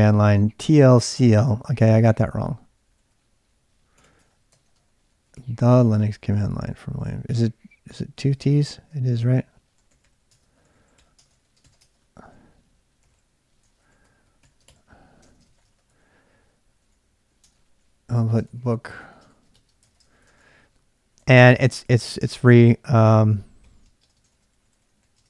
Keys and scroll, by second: 0.5 typing, 2.3-25.2 typing.